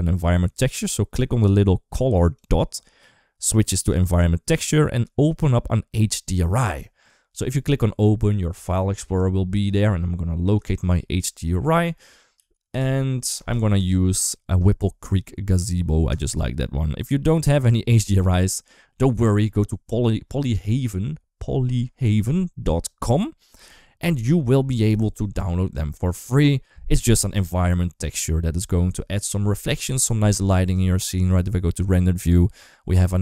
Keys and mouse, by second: 2.1-3.9 drag, 32.5 middle click.